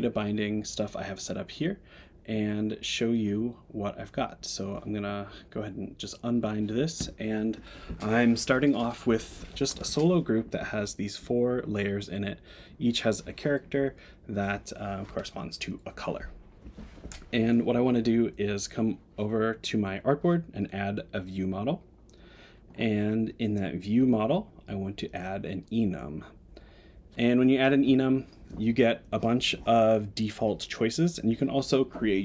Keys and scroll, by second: 2.3 Tab.